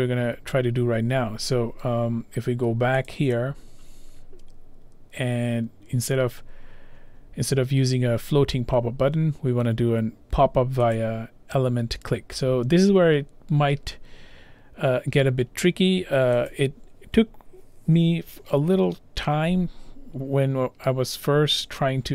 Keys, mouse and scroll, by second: 3.1 click, 11.0 click, 16.5 click.